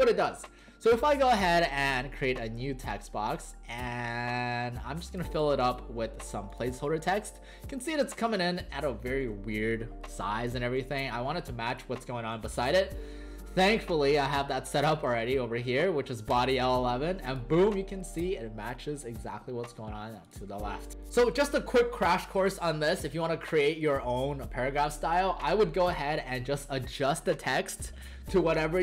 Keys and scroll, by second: 10.8 w, 12.3 w, 17.8 w.